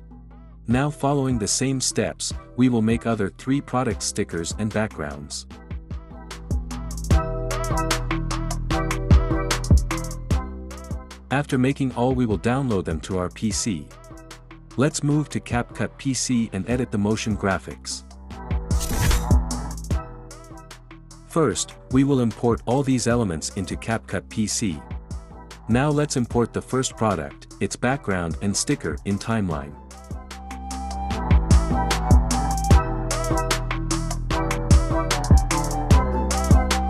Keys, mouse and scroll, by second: 29.5-30.5 drag, 36.3 click.